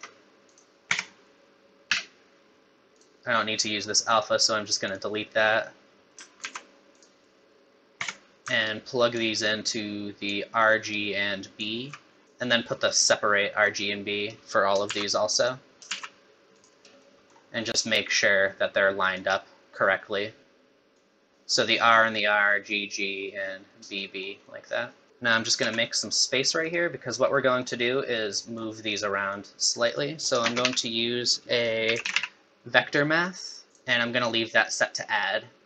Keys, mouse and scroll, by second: 0.5 click, 0.9 Tab, 1.9 n, 3.0 click, 4.9 click, 6.4 ctrl+z, 6.9 click, 8.0 Tab, 8.3 middle click, 8.3 scroll down 2, 8.3 n, 8.7 alt+right click, 9.7 alt+right click, 10.9 alt+right click, 12.2 click, 12.2 scroll down 1, 12.5 click, 14.9 shift+d, 15.9 shift+d, 17.0 middle click, 18.1 click, 20.9 click, 24.0 middle click, 24.4 middle click, 25.1 click, 25.6 g, 27.0 scroll up 1, 27.3 middle click, 28.4 middle click, 29.3 click, 29.9 click, 30.4 shift+a, 33.7 click, 34.7 click.